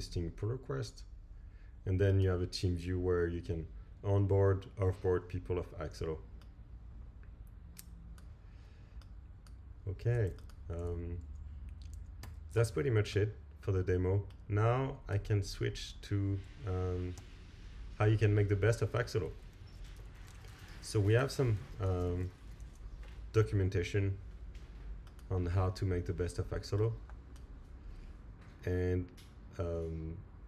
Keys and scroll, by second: 12.2 alt+super+Right, 17.2 Right, 19.6 super+t, 22.6 Return.